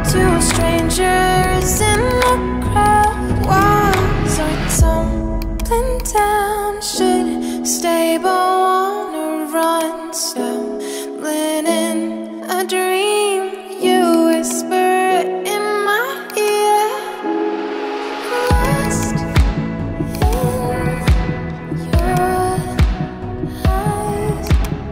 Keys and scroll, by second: 12.9 ].